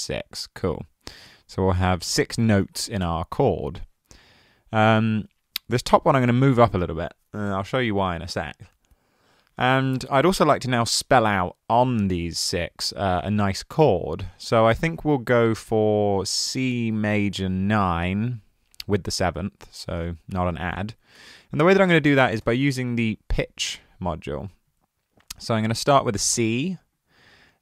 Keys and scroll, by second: 2.6 super+a, 3.1 BackSpace, 20.8 super+a, 22.0-23.3 typing.